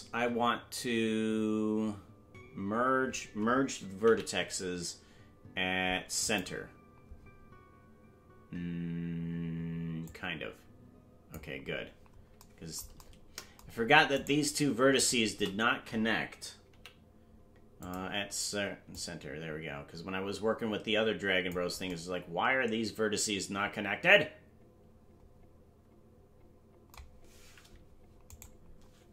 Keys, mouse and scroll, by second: 10.0-11.3 drag, 11.6-12.4 scroll down 4, 14.1 right click, 16.7 m, 18.9-20.1 drag, 20.4-21.5 drag.